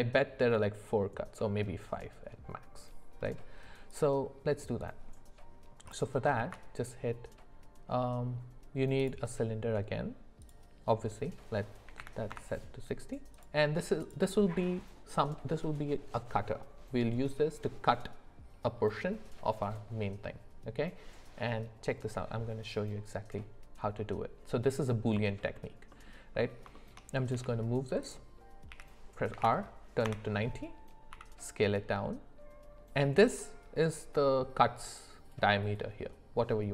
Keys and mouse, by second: 3.9 click, 6.3 shift+a, 10.4-12.3 drag, 13.3 click, 25.5 alt+middle click, 26.7 shift+middle click, 27.3 g, 28.7 r.